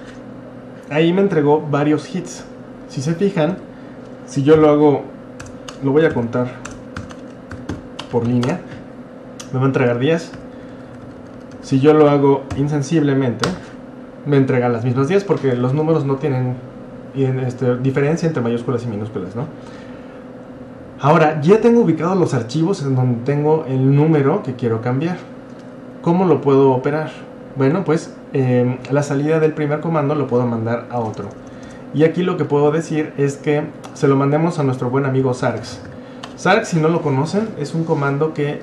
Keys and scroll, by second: 0.0-0.3 typing, 1.5-2.3 typing, 3.5 Up, 4.6 i, 5.7-15.1 typing, 28.8 Up, 31.0-31.8 typing, 35.0-36.4 typing.